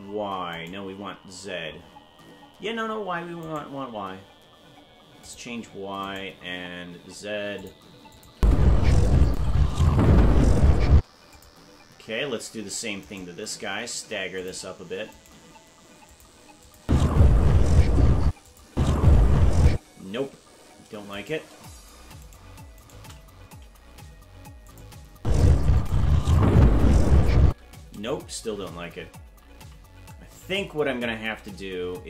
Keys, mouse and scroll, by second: 0.5 right click, 3.5 right click, 3.8 g, 6.0 right click, 6.2 right click, 6.8 g, 8.1 click, 8.3 space, 9.3 click, 10.9 space, 11.3 click, 13.0 right click, 13.4 g, 15.1 right click, 15.3 g, 16.6 click, 16.8 space, 18.3 space, 18.5 click, 18.7 space, 19.7 space, 21.1 right click, 22.2 shift+right click, 22.8 shift+right click, 23.6 g, 25.1 space, 25.8 click, 27.4 space, 29.4 ctrl+z, 30.4 ctrl+z, 31.4 ctrl+z.